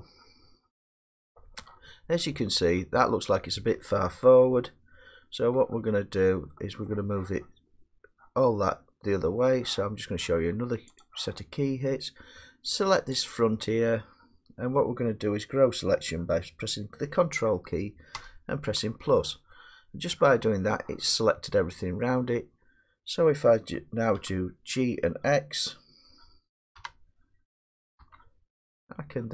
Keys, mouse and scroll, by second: 0.0 middle drag, 0.2 middle click, 0.6 middle click, 1.9-5.7 middle drag, 6.3 scroll, 7.3-11.0 middle drag, 11.0-14.7 drag, 14.7 middle click, 20.2 middle click, 22.4 middle click, 24.2 1, 25.2-27.2 middle drag, 26.8 g, 28.0 x.